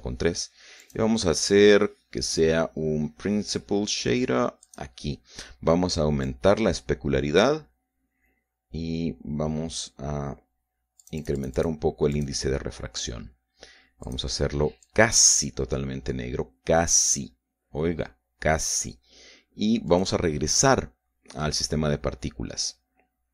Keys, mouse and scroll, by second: 0.0 End, 0.2 Return, 1.8 click, 2.1-5.1 middle drag, 5.6 click, 7.2-8.6 drag, 12.0 click, 13.1 click, 15.0 click, 15.8-18.3 drag, 20.9 click.